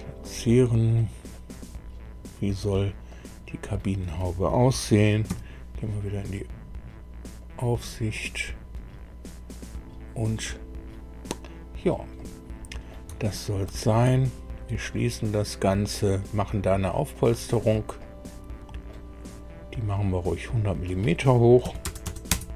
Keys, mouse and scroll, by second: 1.3-2.7 middle drag, 3.0 middle click, 5.2 KP_2, 7.3-8.5 drag, 12.1 middle click, 13.2 shift+click, 14.8 click, 17.1 click, 17.9-19.0 drag, 20.5 click, 21.6 KP_1, 21.8 KP_0, 22.2 KP_0, 22.3 KP_Enter.